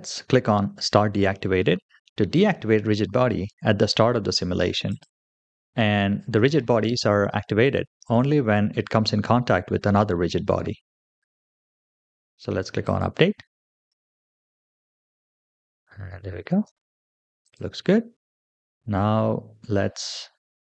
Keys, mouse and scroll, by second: 4.7 click, 11.9-12.7 scroll down 2, 12.7 click, 13.8 space, 16.5 space, 17.3 click, 18.7-19.5 scroll up 3.